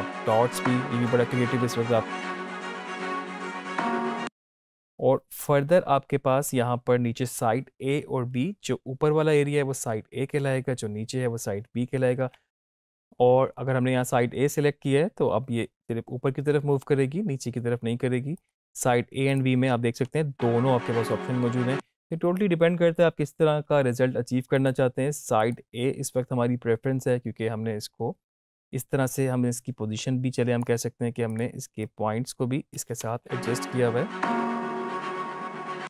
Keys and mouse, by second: 3.9 space, 18.3 click, 18.4 click, 20.0 space, 24.5 click, 29.1-33.0 drag, 33.0 space, 35.4 space.